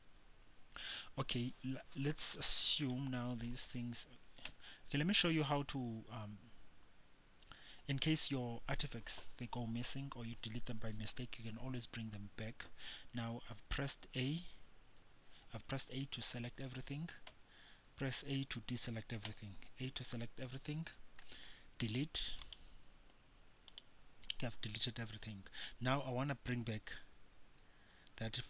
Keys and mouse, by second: 0.0-4.7 middle drag, 4.7 a, 14.5 a, 15.2 a, 17.6 a, 19.5 a, 21.4 Delete.